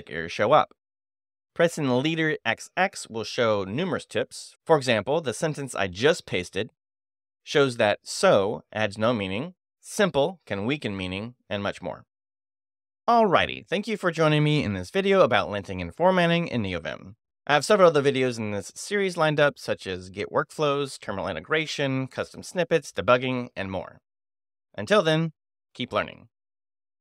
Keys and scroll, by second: 0.3 Escape, 2.6 space, 2.8 x, 4.4 j, 8.1 j, 8.9 j, 11.3 j.